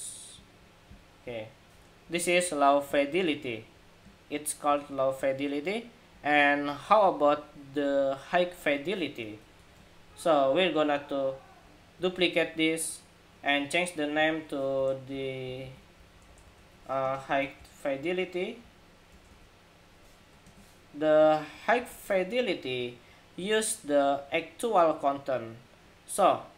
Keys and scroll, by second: 9.4 super+-, 11.6 super+d, 21.5 super+=.